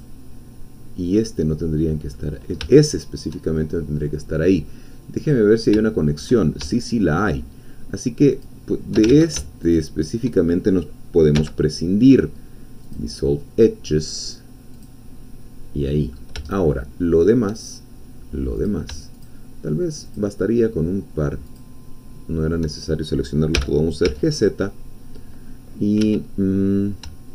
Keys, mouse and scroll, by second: 0.0-2.1 drag, 2.1-3.8 middle drag, 5.2 click, 5.9 shift+click, 6.1 middle click, 6.7 middle click, 8.5 click, 9.2 ctrl+z, 9.6 ctrl+shift+click, 11.4 x, 12.8 click, 14.7 click, 15.9 middle click, 16.5 shift+middle click, 18.7 click, 19.3-20.3 shift+drag, 21.6-22.6 shift+drag, 23.5 g, 24.1 z, 26.0 Escape.